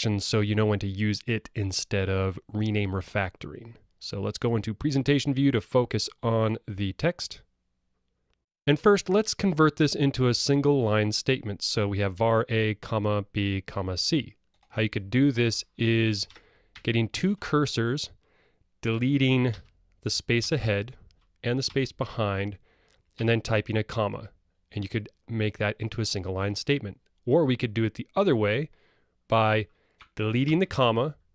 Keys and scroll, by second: 19.5 alt+Delete.